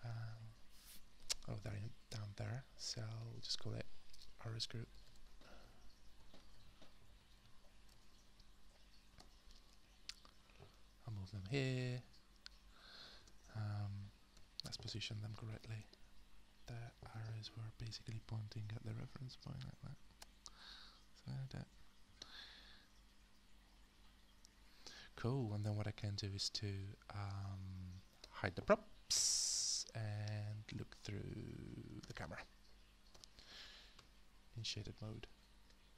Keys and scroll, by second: 4.5-7.9 typing, 9.2 Return, 10.3 w, 13.2 space, 14.3 f, 29.1 h, 30.7 space, 32.0 space, 33.1-34.5 typing.